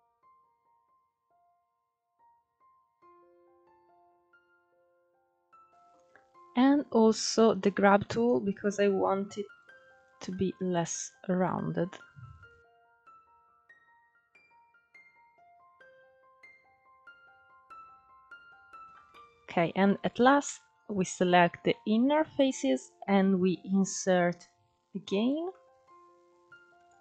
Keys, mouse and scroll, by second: 0.0 click, 0.5 scroll down 3, 0.6 middle click, 0.9 ctrl+z, 1.5 click, 2.1 scroll up 1, 2.2 middle click, 2.4 click, 2.9 scroll up 1, 3.0 click, 3.5 scroll down 3, 3.5-5.0 middle drag, 5.3-6.9 middle drag, 6.9 click, 7.2-7.7 scroll up 3, 7.7 middle click, 8.5-10.7 drag, 10.7-11.1 scroll down 6, 11.1-13.9 middle drag, 13.9-14.4 scroll up 5, 14.4-17.3 drag, 17.3 middle click, 17.7 Tab, 18.3 middle click, 18.7-19.3 scroll up 1, 19.3 ctrl+3, 19.7 click, 20.5 shift+click, 20.8 shift+click, 21.2 shift+click, 21.9-23.0 middle drag, 23.0-23.7 scroll up 1, 23.7 i, 25.2-26.5 middle drag, 26.5-27.0 drag.